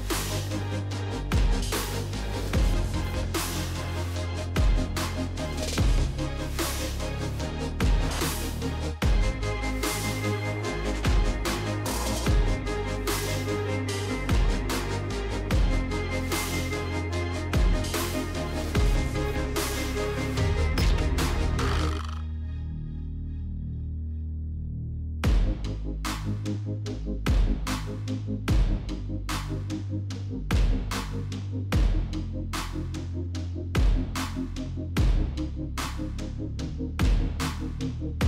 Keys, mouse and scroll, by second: 0.1 click, 0.3 click, 1.1 click, 2.3 click, 3.3 click, 3.6-4.6 typing, 4.9 Return, 5.9-6.7 typing, 6.4 click, 8.1 click, 8.6 click, 9.7 click, 10.1 typing, 11.2-13.1 typing, 13.6 Return, 15.3 click, 16.6 click, 17.1 click, 18.0 click, 21.9 click, 22.8 click, 23.6 click, 25.3 click, 26.1 click, 29.1 click, 33.9 click, 34.3 click, 35.3 click, 36.9 click.